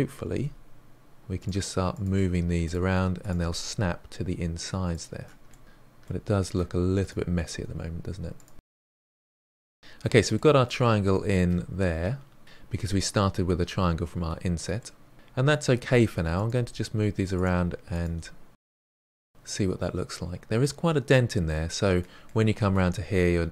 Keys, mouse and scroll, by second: 0.0-1.6 typing, 0.2 click, 0.5 click, 0.9 middle click, 1.5 click, 2.0 scroll down 1, 2.1-4.5 middle drag, 5.0 click, 5.0 g, 5.8 click, 5.8 g, 6.6 scroll down 2, 6.8-7.6 middle drag, 8.4 g, 8.8 middle drag, 9.0 click, 9.0 g, 9.5 scroll down 1, 9.6-12.4 middle drag, 14.8 middle click, 15.1 scroll up 2, 15.4 middle click, 15.8 click, 16.0 g, 16.8 click, 16.8 g, 18.1 click, 18.2 g, 19.4 click, 19.5 g, 20.3-20.7 scroll down 1, 20.7-22.4 middle drag.